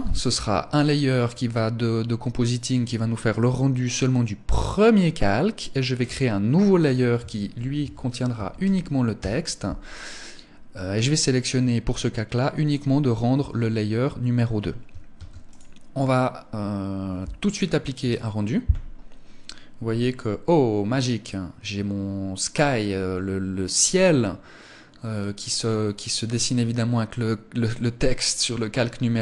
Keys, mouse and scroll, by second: 1.9 click, 5.4 click, 11.9 click, 14.5 ctrl+s.